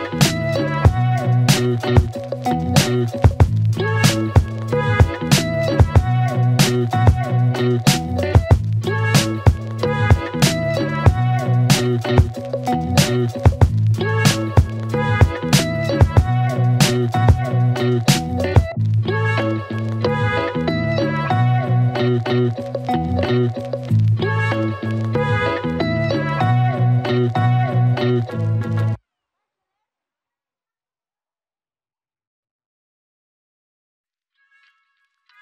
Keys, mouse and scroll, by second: 5.1 click, 7.3 click, 11.2 click, 16.0-17.7 click, 20.0 click, 23.5 click, 26.3 click, 29.4-30.8 scroll up 1, 31.7 click, 33.2-35.4 typing.